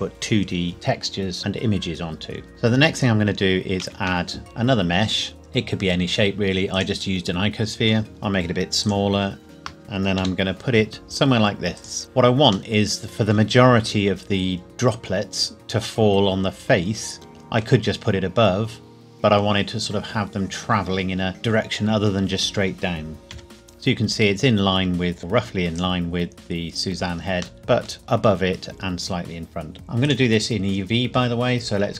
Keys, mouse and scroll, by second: 2.5 middle click, 3.4 scroll down 1, 3.8 shift+a, 6.8 click, 8.1 s, 8.8 click, 10.2 g, 11.8 click, 12.8 middle click, 17.3 middle click, 23.3 middle click, 23.5 KP_7, 25.2 g, 25.8 click, 27.6 middle click, 29.7 click.